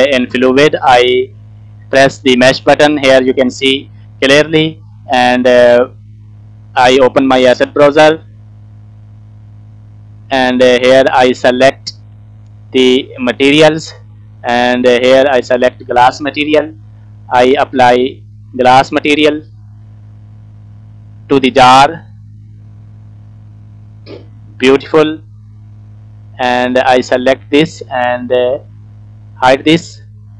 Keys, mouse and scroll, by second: 3.5 click, 5.2 shift+middle click, 5.7 scroll up 2, 6.9 click, 8.0-10.4 drag, 13.4 click, 15.1 click, 17.0 middle click, 17.7-18.1 scroll up 2, 18.1 click, 20.8-22.3 drag, 23.4 scroll down 1, 23.6 middle click, 24.4-25.1 scroll up 1, 25.2 shift+middle click, 26.4 click, 28.8 click, 29.5 scroll down 2, 29.7 middle click, 30.1-30.3 scroll up 1.